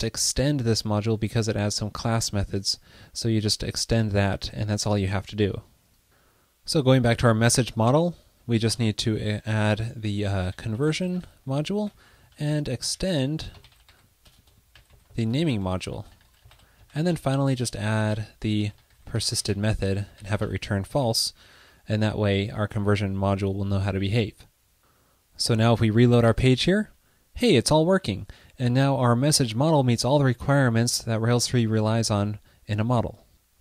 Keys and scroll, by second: 8.5 ctrl+shift+d, 12.5 super+Left, 12.7 alt+Right, 15.6 alt+shift+super+Right, 17.0 super+Down, 17.3 super+Right, 21.1 super+s, 26.3 super+r.